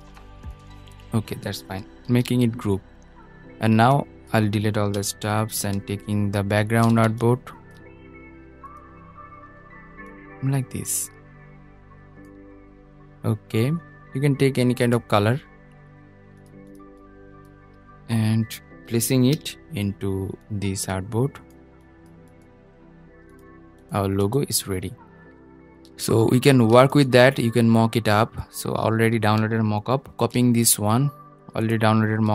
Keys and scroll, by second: 1.1 super+g, 18.4 super+}, 29.2 super+c.